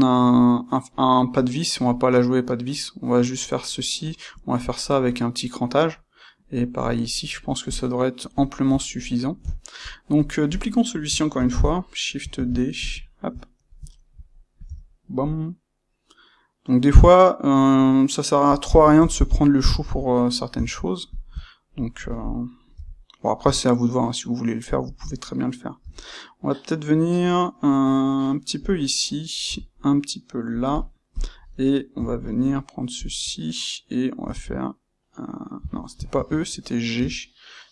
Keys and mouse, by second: 7.6 click, 8.4-10.5 shift+middle drag, 10.5 click, 11.3-12.3 shift+middle drag, 12.3 shift+d, 12.8 click, 12.9-18.6 shift+middle drag, 14.6 g, 18.6 click, 18.8-21.0 ctrl+shift+middle drag, 19.5 Tab, 21.0 click, 22.6 g, 24.9 click, 25.7 g, 28.6 click, 29.4 g, 31.0 click, 31.9 g, 33.0 ctrl+click, 34.2 e, 35.6 Escape, 36.1 ctrl+z, 36.9 g.